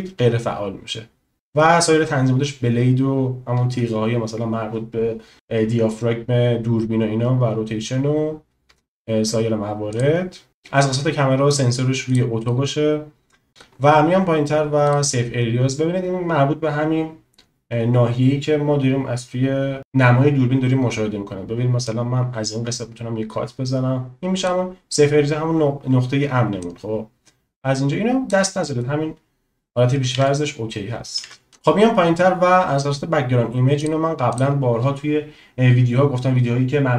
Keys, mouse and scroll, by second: 9.9 click, 12.0 click, 14.9 click, 22.0-24.5 drag, 26.5-28.4 drag, 30.4 ctrl+z, 33.9 click, 34.4 click.